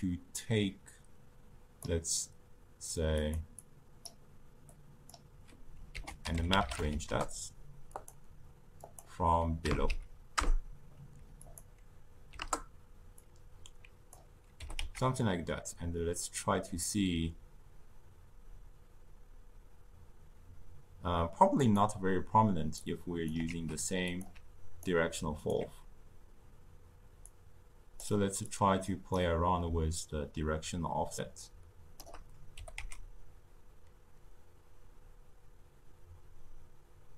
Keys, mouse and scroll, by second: 3.1 click, 3.5-4.7 drag, 5.9 ctrl+a, 8.7-13.2 drag, 14.5 g, 22.7 click, 23.4 shift+d, 24.7-27.2 alt+right drag, 27.2-27.9 drag, 28.4 drag, 29.9-32.5 shift+drag, 32.5 g.